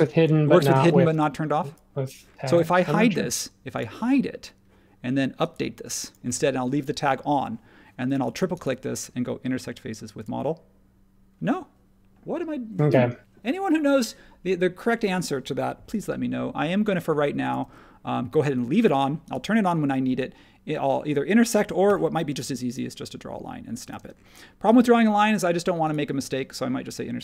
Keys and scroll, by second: 16.8 super+z, 17.6 super+z, 24.0 space, 24.9 super+z.